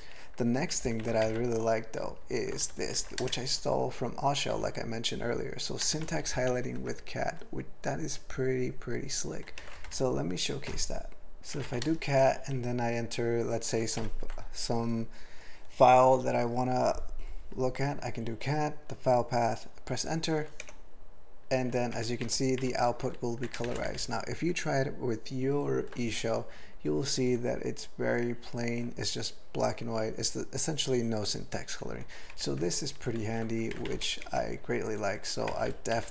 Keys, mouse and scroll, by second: 0.7 ctrl+n, 0.9 ctrl+n, 1.2 alt+m, 2.0 ctrl+l, 2.6 alt+f, 2.8 alt+f, 3.0 alt+b, 3.2 ctrl+space, 3.4 ctrl+alt+f, 4.5 ctrl+g, 5.8 ctrl+space, 6.0 ctrl+alt+b, 6.5 ctrl+g, 11.4 ctrl+/, 11.4-12.1 typing, 14.0 ctrl+y, 20.8 Return, 21.9 alt+v, 22.3 alt+v, 23.7 alt+<, 24.0-24.6 ctrl+n, 28.3 ctrl+n, 32.3 ctrl+v, 32.6 ctrl+v, 33.2 ctrl+l, 35.5 alt+m, 35.9 ctrl+l.